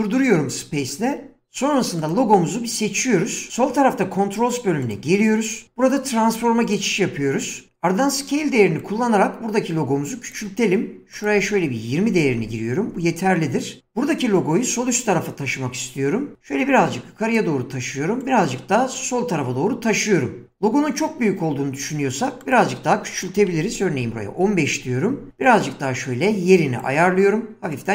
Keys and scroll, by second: 11.7-12.7 typing, 23.1-24.1 typing.